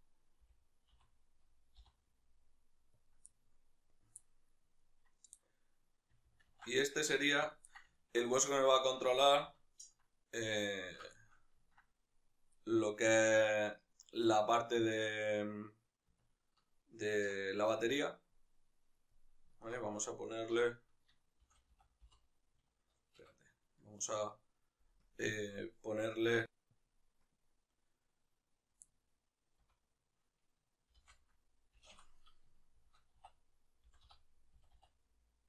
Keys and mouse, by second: 0.4 g, 3.3-4.8 middle drag, 4.8 right click, 5.4-6.5 right drag, 6.5 ctrl+alt+s, 7.6 click, 7.7-28.8 middle drag.